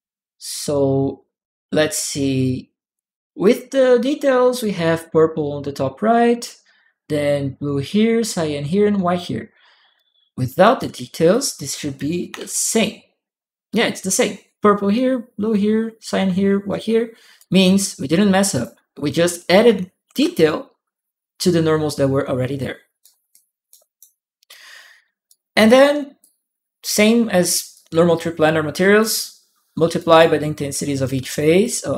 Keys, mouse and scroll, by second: 0.5 click, 1.6 click, 2.7 click, 5.9 click, 9.7 click, 11.1 click, 12.2 p, 17.1 shift+click, 17.2 p, 18.3 shift+click, 19.8 shift+p, 19.9 shift+p, 22.8 right click, 23.1 click, 25.0 right click, 26.0 click, 27.5-28.8 drag, 29.7 right click, 30.9 click, 31.3 click.